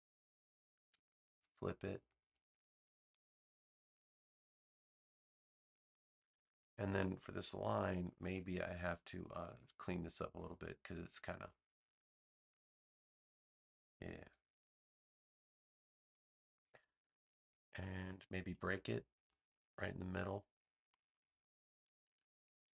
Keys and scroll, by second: 8.2 a.